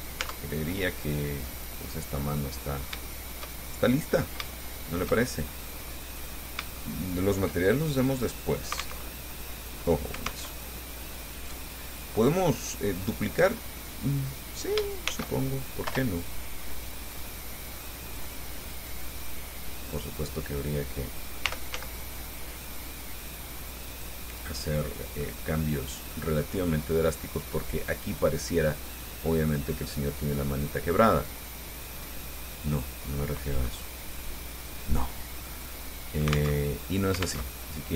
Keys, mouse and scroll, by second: 0.1 Tab, 0.8-1.1 scroll down 1, 1.2-3.3 drag, 4.1-6.3 drag, 6.4-6.7 scroll up 1, 7.0 shift+middle click, 7.9-8.2 shift+scroll down 3, 9.3 alt+Tab, 10.7 alt+Tab, 12.8-13.8 middle drag, 15.3 shift+d, 16.1 Return, 17.3-18.6 drag, 19.1-20.4 drag, 21.7 r, 22.0 z, 24.1 click, 24.9-26.6 middle drag, 27.2-29.9 drag, 30.0 middle click, 30.0-33.6 drag, 36.8 alt+Tab, 37.7 alt+Tab.